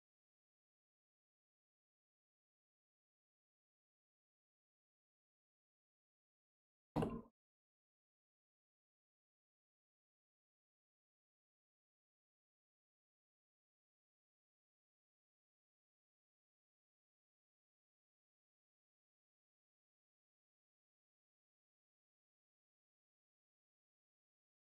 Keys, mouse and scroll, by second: 1.3 middle click, 1.7 scroll up 2, 2.0-3.8 middle drag, 3.8 h, 4.2 middle click, 5.1 click, 6.9 ctrl+space, 10.2 click, 16.7 click, 17.1-20.0 middle drag, 20.0 click.